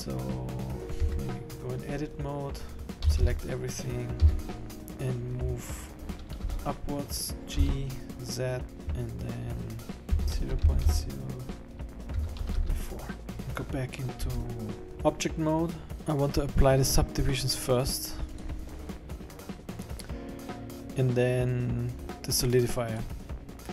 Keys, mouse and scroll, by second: 1.3 Tab, 2.9 scroll down 4, 3.1 a, 3.3 a, 4.4 a, 4.8 click, 4.8 scroll up 3, 6.5 g, 14.5 Tab, 14.9 middle click, 15.0 middle click, 18.4 click, 23.0 click.